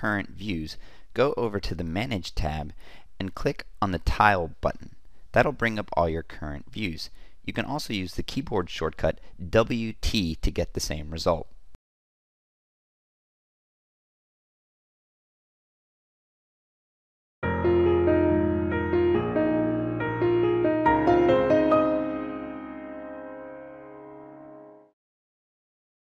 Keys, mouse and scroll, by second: 7.2-7.9 typing.